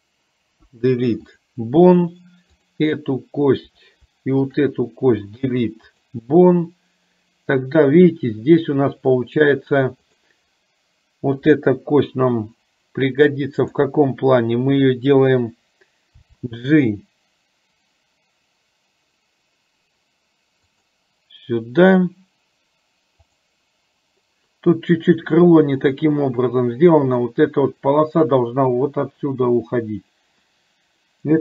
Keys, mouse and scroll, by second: 0.7 Delete, 2.7 click, 4.5 shift+click, 5.4 Delete, 13.7 click, 16.3 g, 23.4 click.